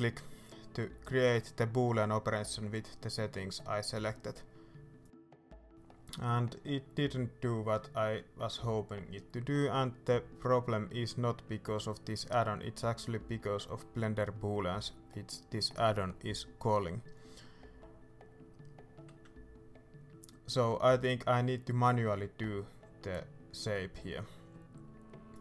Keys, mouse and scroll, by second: 2.3-2.6 scroll up 2, 2.6 middle click, 3.4 scroll down 2, 3.6-10.5 middle drag, 4.5-4.9 scroll up 2, 5.6 scroll down 2, 7.0 scroll up 2, 8.4 scroll down 2, 9.4-10.0 scroll up 2, 10.0 ctrl+z, 10.9 scroll down 1, 11.2 middle click, 11.6-12.0 shift+scroll up 1, 12.0 ctrl+z, 12.4 scroll up 1, 12.7 middle click, 15.0 Escape, 15.4 middle click, 16.3 ctrl+z, 16.8 middle click, 17.2 ctrl+z, 18.3 scroll down 2, 18.5 middle click, 19.2 scroll up 2, 19.4 ctrl+z, 19.6-25.4 middle drag, 23.1-23.4 scroll up 2, 24.0-24.4 scroll down 2.